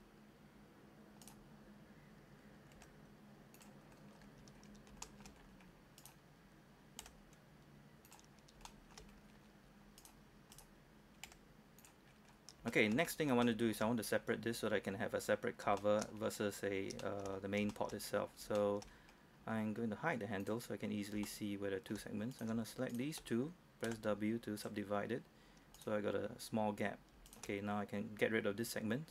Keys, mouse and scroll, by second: 2.8 g, 3.6 click, 3.9-4.3 scroll down 1, 4.3-4.7 scroll up 1, 4.7 scroll down 1, 5.1 shift+middle click, 5.5-6.1 scroll up 1, 6.1 right click, 7.1 g, 8.2 click, 8.4-8.7 scroll down 1, 8.7-10.1 shift+scroll up 2, 10.1 right click, 11.4 g, 11.9 click, 12.2-12.7 scroll down 1, 12.8 shift+middle click, 13.2 scroll up 1, 13.5 shift+middle click, 15.9 shift+middle click, 16.2-16.5 scroll up 1, 16.5 scroll down 1, 17.1 shift+middle click, 17.8 shift+middle click, 18.2-18.5 scroll up 1, 18.7 shift+middle click, 19.2-19.6 scroll up 1, 19.6-20.5 scroll down 1, 20.5 click, 21.3 shift+middle click, 22.4 right click, 23.0 shift+right click, 24.0 shift+w, 24.7 click, 25.8 right click, 27.4 shift+right click.